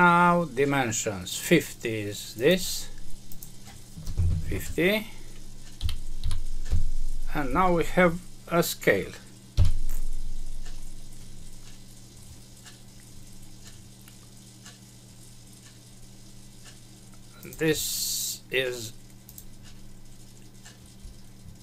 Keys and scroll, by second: 6.6 Return, 9.5 Home.